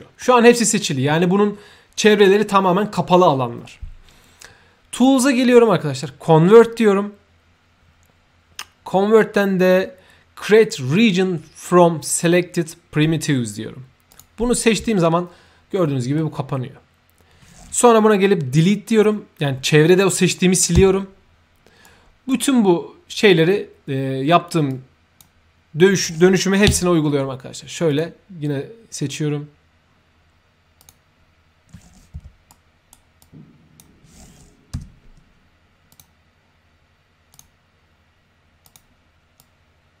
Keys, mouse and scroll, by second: 4.9 click, 14.0 click, 15.0 space, 15.8 middle click, 21.8-22.2 right drag, 24.7-25.2 drag, 26.9 Tab, 27.9 click, 30.8 click, 32.5-32.9 right drag, 33.2-33.8 drag, 35.9 click, 37.3 click, 38.6 click, 39.4-40.0 drag.